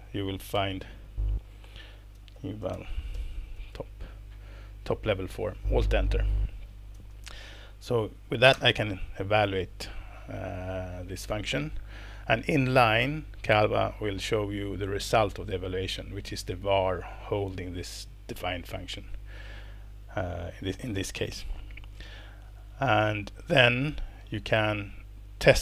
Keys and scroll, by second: 0.5 shift+super+p, 1.9-4.2 typing, 6.7-7.4 typing, 8.5 alt+Return, 23.0 Escape.